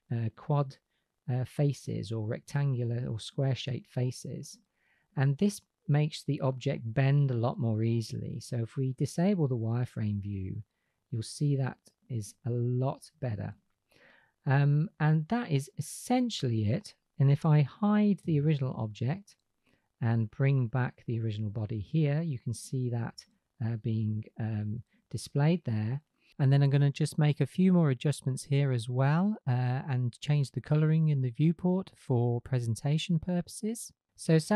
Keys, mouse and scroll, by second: 3.0-9.0 middle drag, 9.0-11.2 drag, 18.2 h, 20.2 click, 20.8 click, 26.0 drag, 29.0 click, 31.3 click, 32.1 middle click.